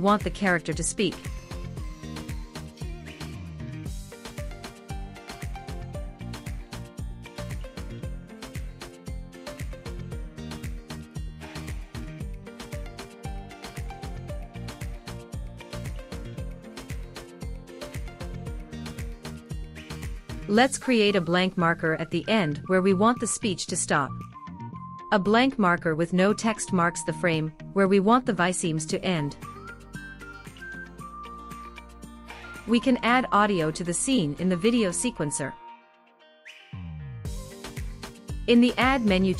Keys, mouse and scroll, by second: 4.0 click, 8.7-9.4 drag, 10.0-12.4 drag, 13.4 click, 14.4 click, 22.0 click, 23.7-25.5 drag, 26.7 click, 33.9-36.2 drag, 38.8-39.3 drag.